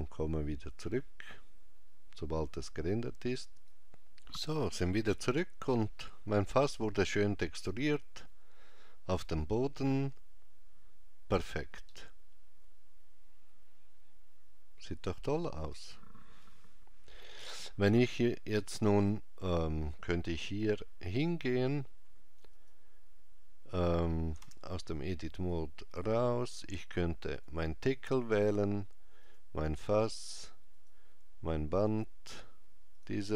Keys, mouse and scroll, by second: 16.9 Escape, 19.5 click, 22.3 click, 24.2 Tab, 25.1 click, 27.1 click, 29.0 shift+click, 30.6 shift+click.